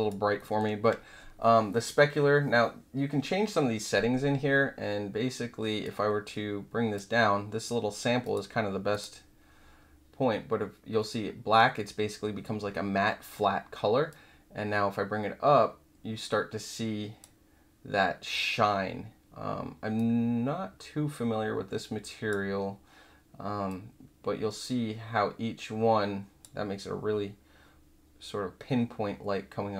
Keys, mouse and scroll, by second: 0.3 alt+middle click, 5.8-6.9 drag, 8.2 click, 8.9 click, 14.0-17.2 drag, 19.9-22.2 drag, 23.6-26.4 drag.